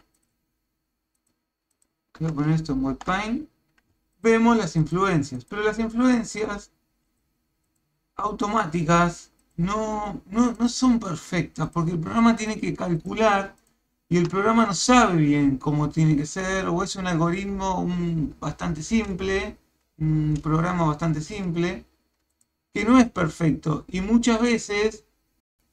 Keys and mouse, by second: 0.2 click, 1.2 click, 1.7 click, 2.3 ctrl+Tab, 4.2 ctrl+click, 4.8 ctrl+click, 5.4 ctrl+click, 5.8 ctrl+click, 6.3 ctrl+click, 7.1 ctrl+click, 7.7 ctrl+click, 8.3 ctrl+click, 8.8 ctrl+click, 9.4 ctrl+click, 10.0 ctrl+click, 10.6 ctrl+click, 11.7 ctrl+click, 12.4 ctrl+click, 13.0 ctrl+click, 13.6 ctrl+click, 22.3 ctrl+click.